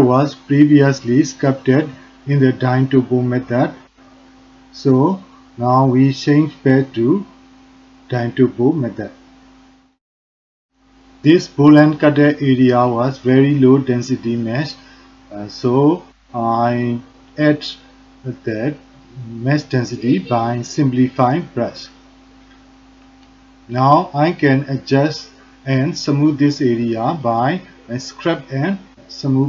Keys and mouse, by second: 1.3-3.2 drag, 3.7 shift+click, 5.1-8.1 drag, 8.3 alt+click, 13.8 f, 14.9 ctrl+alt+click, 15.5 f, 16.2 click, 17.2 click, 17.8 click, 18.4 click, 19.2 click, 19.7 click, 20.2 click, 20.6 alt+click, 21.1 click, 21.4 click, 21.8 alt+click, 22.8 click, 23.4 ctrl+alt+click, 23.7 alt+shift+click, 24.0 alt+click, 24.4 click, 25.4 5, 25.8 middle click, 26.3 f, 27.0 click, 28.4 ctrl+alt+click, 28.8 shift+click, 29.1 click.